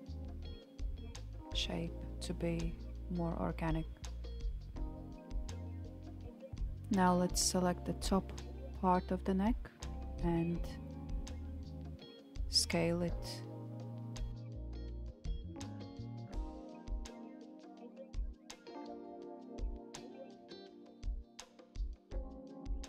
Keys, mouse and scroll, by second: 7.0 alt+z, 7.8 click, 8.5 click, 9.4 alt+z, 10.9 s, 17.3-18.4 scroll down 3, 18.7 s, 20.9 alt+click, 22.1 s.